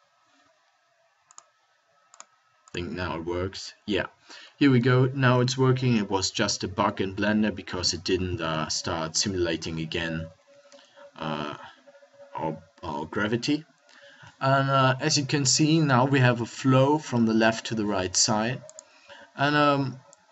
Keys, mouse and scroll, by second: 6.5 middle click, 8.7 KP_1, 9.9 middle click, 10.8 a.